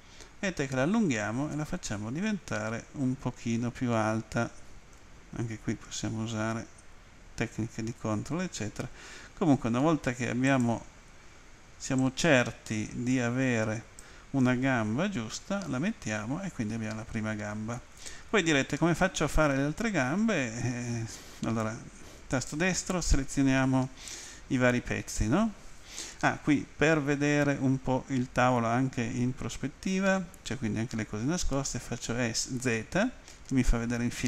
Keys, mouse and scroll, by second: 10.5 ctrl+click, 12.0 click, 15.3 middle click, 19.2 Home, 22.3 right click.